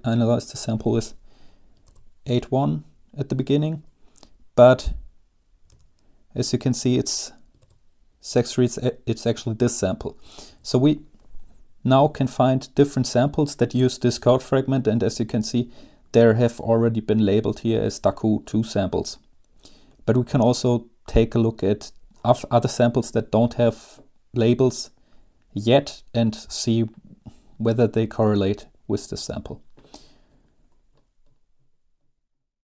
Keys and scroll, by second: 2.1 super+5, 6.0 super+2, 7.9 super+5, 10.7 super+2.